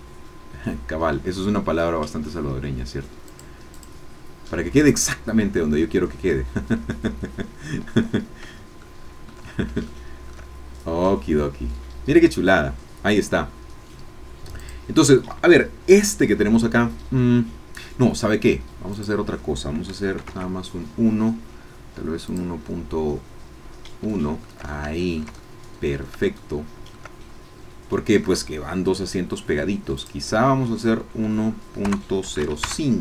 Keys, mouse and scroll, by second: 3.3 click, 3.7 click, 4.8 click, 5.8-8.0 shift+middle drag, 8.8 shift+middle click, 8.9 shift+click, 9.5 shift+middle click, 9.9 shift+middle click, 14.7 click, 18.9-20.2 drag, 20.2 KP_1, 20.3 KP_Enter, 22.2 click, 24.7 shift+click, 25.4 shift+click, 26.3 shift+click, 27.0-28.8 shift+middle drag, 30.0-31.2 drag, 31.2 Right, 32.3 KP_0, 32.4 KP_5, 32.7 KP_Enter.